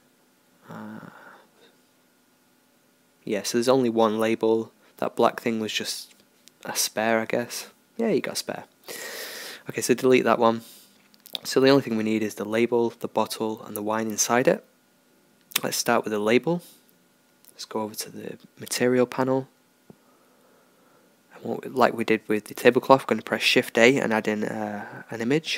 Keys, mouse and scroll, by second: 0.5 g, 2.0 g, 4.7 h, 5.1-7.0 right drag, 6.3 g, 7.8 x, 10.0 alt+h, 10.8-12.6 right drag, 12.0 g, 15.4-19.3 drag, 19.8-21.6 drag, 23.4-25.5 middle drag, 24.5 shift+a.